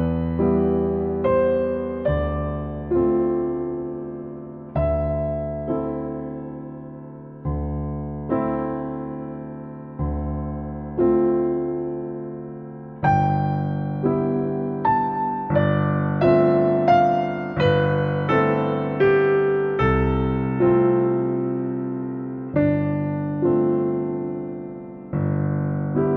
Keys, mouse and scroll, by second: 0.1 click, 0.6 g, 1.5 middle click, 1.9 shift+a, 3.4-5.4 drag, 5.4 scroll down 2, 5.6 middle click, 5.7-6.3 scroll up 7, 5.9 middle click, 6.3 middle click, 6.6 s, 8.1 click, 8.6 middle click, 8.8 Delete, 9.5 shift+a, 10.4 shift+a, 12.8-16.6 drag, 16.7 middle click, 17.5-19.5 drag, 20.9-23.1 middle drag, 23.1 click, 23.8-24.9 middle drag, 24.9-26.1 drag.